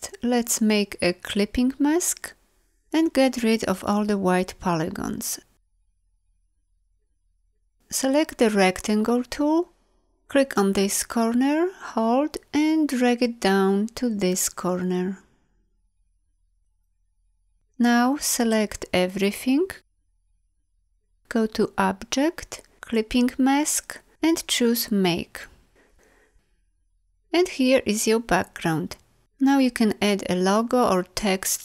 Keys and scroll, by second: 19.3 ctrl+a.